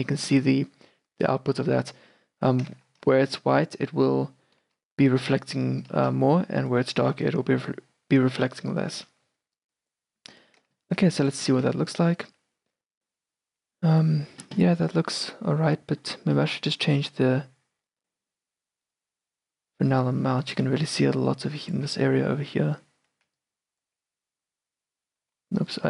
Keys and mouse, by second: 3.1 shift+b, 4.7 shift+b, 6.1 shift+b, 7.1 shift+b, 9.1 shift+b, 11.3-14.3 drag, 12.0 shift+b, 14.7-17.0 middle drag, 17.0-20.0 drag, 20.9 d, 21.1-23.3 drag, 21.9 d, 23.3 d, 23.5-25.4 drag, 24.0 d, 25.4 d, 25.4 n.